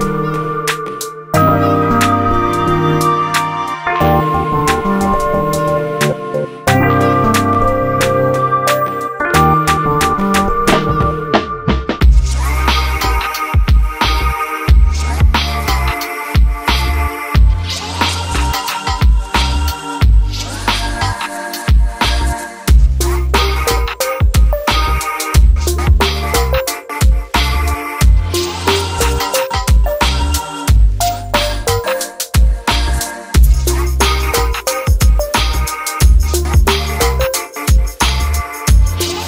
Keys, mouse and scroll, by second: 0.8 click, 1.0 g, 2.3 click, 2.9 g, 3.7 click, 3.8 g, 5.5 click, 5.7 g, 7.3 click, 7.5 g, 9.8 g, 11.7 click, 11.9 g, 12.9 click, 13.0 g, 14.0 click, 14.3 g, 16.4 click, 16.6 g, 19.6-21.0 scroll down 1, 21.0 click, 21.3 g, 22.3-22.8 scroll down 1, 22.8 click, 23.1 g, 24.8 click, 25.1 g, 26.4 click, 26.6 g, 28.4 click, 28.6 g, 29.8 click, 30.0 g, 32.9 click, 33.1 g, 33.9 g, 36.0 click, 36.2 g.